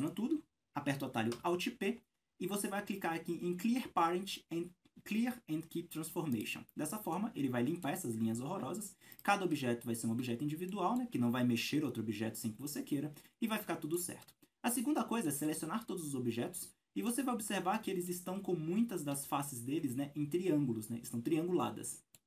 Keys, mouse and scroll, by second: 9.2 right click, 9.7 g, 10.3 Escape, 10.7-20.1 middle drag, 14.2 a, 15.6 Tab, 16.1-16.5 scroll up 1, 17.1 scroll up 1, 20.1-20.5 scroll down 1, 21.4-22.2 middle drag.